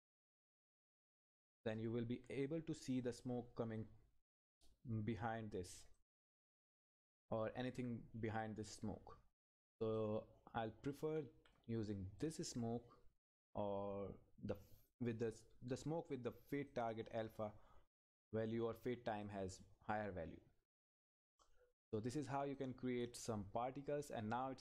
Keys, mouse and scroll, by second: 0.7 Right, 6.0 click, 7.2 Left, 9.9 click, 10.0 Left, 12.2 click, 12.7-13.2 scroll down 1, 14.9 click, 19.2 click, 20.5-20.9 scroll up 1, 22.6-24.6 drag.